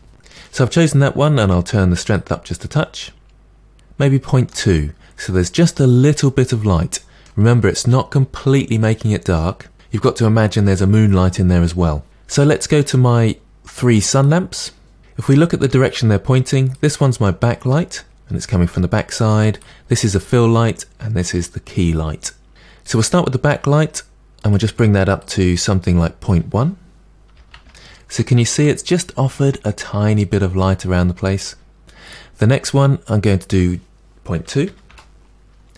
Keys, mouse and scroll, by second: 0.0 Return, 2.1-3.9 drag, 4.5-13.8 middle drag, 13.8 click, 14.2 click, 15.0-16.7 middle drag, 16.7 click, 17.3-19.6 middle drag, 19.6 click, 21.3 click, 23.0 click, 24.5 click, 27.7 click, 28.2-32.1 middle drag, 32.1 click, 34.9-35.7 drag.